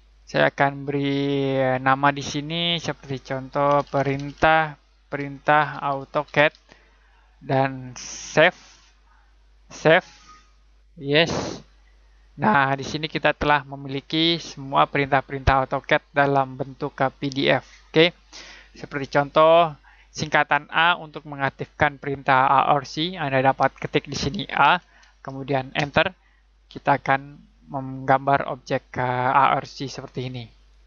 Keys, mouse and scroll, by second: 3.4-7.0 typing, 8.2 click, 13.3 scroll up 1, 14.1-14.5 ctrl+scroll up 2, 15.0-15.6 scroll down 1, 16.6 click, 20.3 click, 24.6 a, 25.7 space, 26.4 click, 27.6 click.